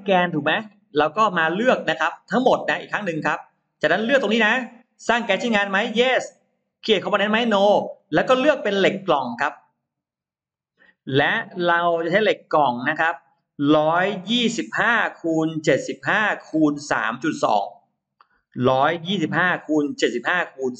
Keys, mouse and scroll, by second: 0.1-0.7 scroll up 2, 0.6 middle click, 1.1-1.4 scroll down 1, 1.9 click, 2.7 click, 7.8 click, 10.4 click, 12.4 scroll down 1, 13.6-13.9 scroll up 1, 17.5 click.